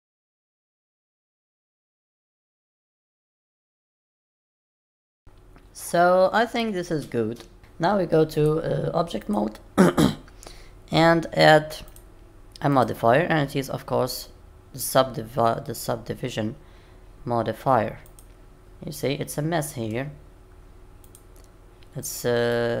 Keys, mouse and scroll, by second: 0.0-4.7 typing, 0.0 click, 0.4 click, 1.1 click, 1.4 click, 1.8 click, 2.1 click, 2.4 click, 2.8 click, 3.1 click, 3.3 click, 3.8 click, 4.2 click, 4.6 click, 5.1 middle click, 8.3 click, 10.0 middle click, 11.9 click, 12.7 click, 18.6 middle click, 21.6 click, 22.5 middle click.